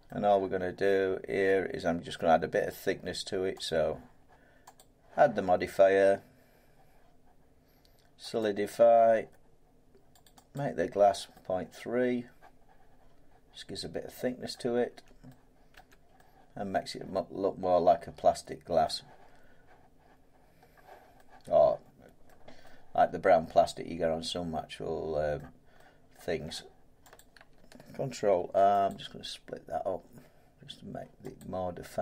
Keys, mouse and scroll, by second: 3.6 click, 4.7 click, 8.4 click, 10.2 click, 10.5 click, 14.4 middle click, 14.8 Tab, 15.7 middle click, 15.7 Tab, 18.8 middle click, 20.5 middle click, 20.7 scroll, 22.2 middle click, 22.5 scroll, 23.3 scroll up 1, 25.3 middle click, 26.1 scroll, 26.3 Tab, 27.1 click, 28.3 ctrl+r, 28.8 click, 31.4 click.